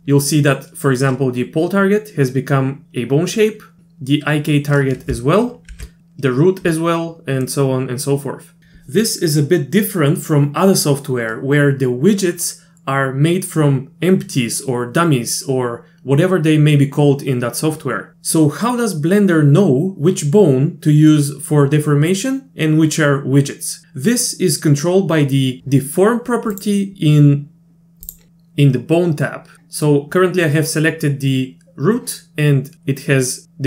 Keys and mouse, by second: 5.7 alt+h, 7.5-8.6 middle drag, 28.1 drag.